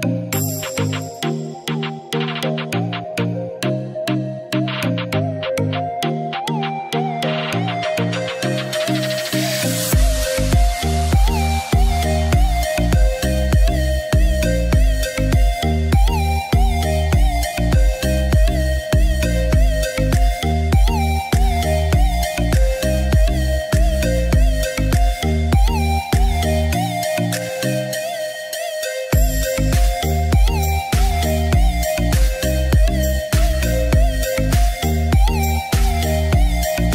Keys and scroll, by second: 19.9 ctrl+z, 33.9 ctrl+z.